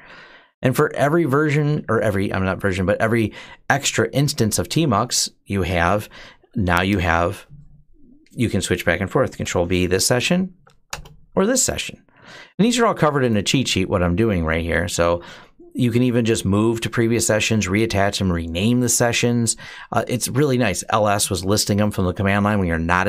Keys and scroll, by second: 0.6 Down, 1.6 Up, 6.7 Return, 9.2 ctrl+b, 10.0 s, 10.3 Down, 10.7 Return, 13.5 Return, 13.5 ctrl+b, 13.5 Down, 13.5 s.